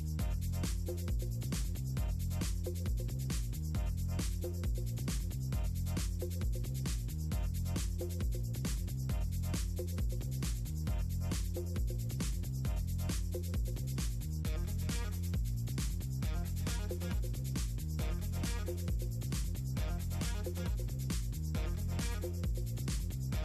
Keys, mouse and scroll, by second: 0.2 click, 0.8-1.4 drag, 1.6-2.5 drag, 2.6 click, 4.7 click, 4.9 scroll up 2, 5.6 click, 6.0 click, 7.6 middle click, 7.9 middle click, 8.0 ctrl+scroll down 2, 8.2 middle click, 9.0 ctrl+z, 9.6 click, 10.0 click, 10.2 click, 11.0 click, 11.3 click, 11.8 middle click, 11.9 click, 12.3-13.4 right drag, 13.6 click, 15.2 scroll up 2, 15.4-16.1 scroll down 2, 18.2 click, 18.4 click, 19.7 c, 20.2 o, 22.9 click.